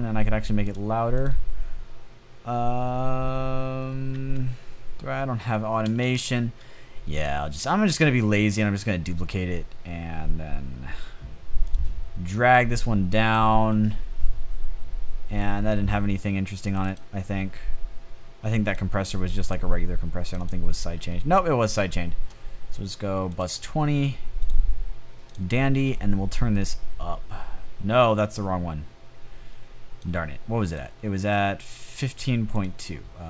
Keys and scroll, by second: 3.6 a, 5.3 typing.